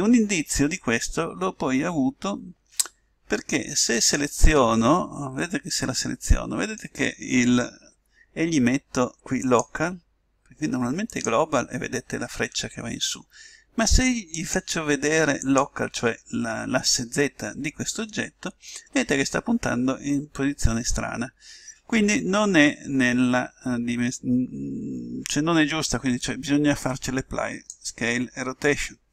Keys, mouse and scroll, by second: 4.0-5.6 right drag, 5.4 middle click, 9.4-11.4 drag, 14.3-16.0 drag, 26.8-28.5 drag.